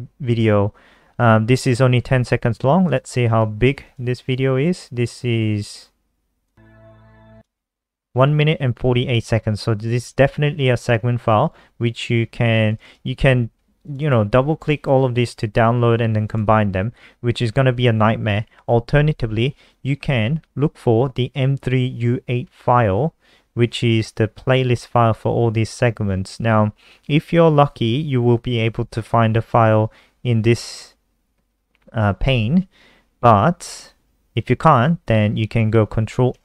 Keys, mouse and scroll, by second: 12.6 click, 13.6 click, 13.7 click, 14.3 click, 14.5 click, 15.0 click, 15.2 click, 16.0 click, 19.9 scroll down 1, 31.2-31.9 scroll down 1, 31.9 scroll down 2, 33.1 scroll down 1, 33.7-34.1 scroll down 1, 34.7 click.